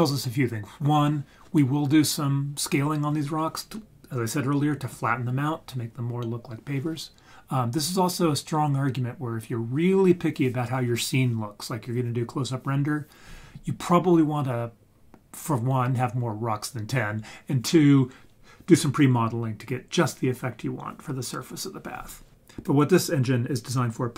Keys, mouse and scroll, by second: 0.1 scroll up 2.